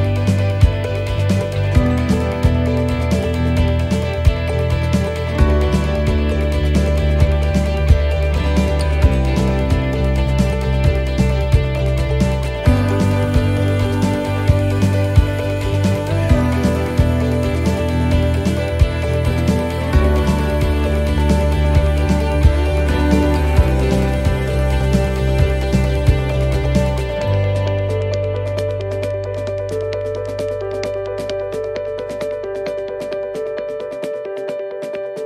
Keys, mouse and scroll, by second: 0.1-0.6 scroll up 4, 0.5 shift+middle click, 3.0 right click, 4.1 click, 5.3 right click, 7.3 l, 7.9-8.5 scroll down 3, 8.3 middle click, 8.8 l, 9.8 x, 11.2 scroll up 1, 11.8 right click, 11.8 scroll up 1, 12.8 l, 13.5 middle click, 13.8-14.3 scroll down 1, 14.4 l, 15.6 x, 16.6 middle click, 18.8-19.4 scroll down 2, 19.3 shift+middle click, 19.9 middle click, 19.9 scroll up 2, 20.3 scroll down 1, 20.7 shift+middle click, 21.1 middle click, 21.5-21.9 scroll down 1, 22.0 shift+middle click, 22.4 scroll up 1, 25.3 scroll up 1, 27.7 shift+middle click, 27.7 scroll down 2, 29.1 click, 29.1-29.5 scroll up 2, 30.9 right click, 32.7 click, 33.1 shift+middle click, 33.5 scroll up 1, 34.3 right click, 34.3 scroll up 2.